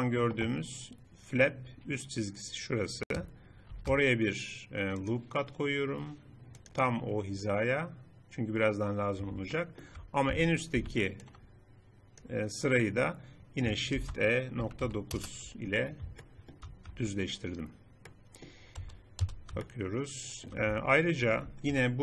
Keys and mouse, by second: 3.7 ctrl+r, 9.6 click, 9.8 middle click, 10.3 a, 10.9 b, 14.0 shift+e, 15.8 middle click, 17.0 Tab, 19.2 z, 20.9 Tab, 21.7 KP_3.